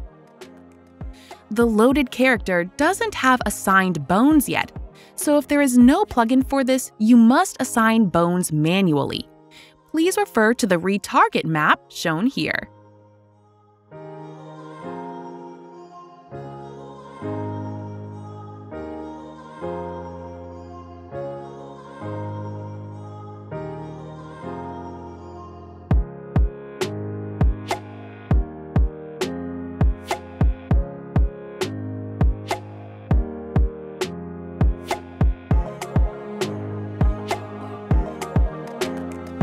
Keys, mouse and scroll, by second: 0.1 click, 2.4 click, 2.6 click, 4.0 click, 4.4 click, 5.3 click.